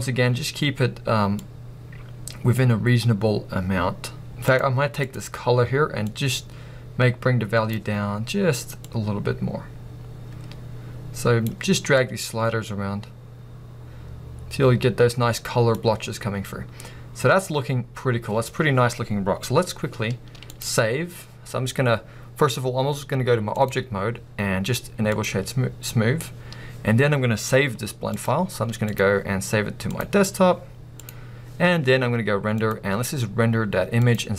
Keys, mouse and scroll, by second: 2.1-4.5 drag, 5.1 click, 9.0-25.2 drag, 20.6 z.